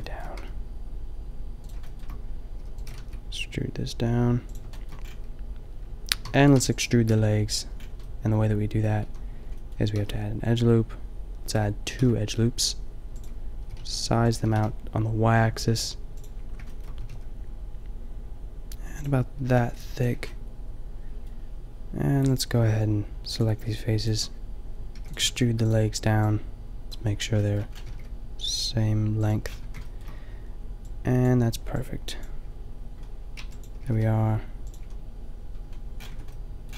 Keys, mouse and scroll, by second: 0.3 g, 2.6 e, 2.9 g, 6.2 a, 6.6 b, 9.1 a, 10.0 ctrl+r, 12.0 ctrl+r, 13.6 s, 14.5 s, 16.6-18.8 drag, 17.0 s, 19.5 s, 19.7 click, 20.2 a, 20.6-22.3 middle drag, 22.7 middle click, 24.9 e, 25.2 g, 26.9 e, 26.9 g, 27.9 g, 29.3-30.9 drag, 29.7 a, 33.4 b, 33.8 g, 34.7 click, 34.8 a, 36.0-36.7 drag, 36.2 Tab.